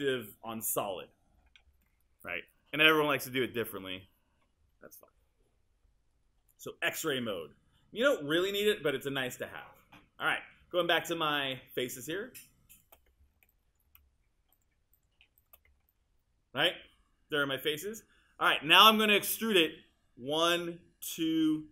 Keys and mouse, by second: 15.6 click.